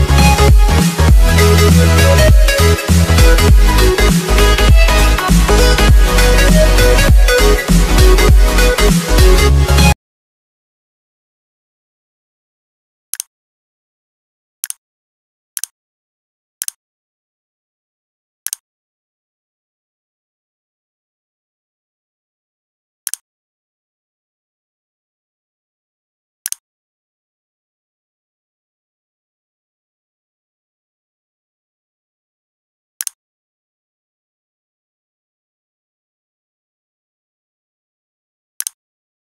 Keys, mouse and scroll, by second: 6.5 ctrl+c, 7.3 click, 7.9 ctrl+v, 8.9 click.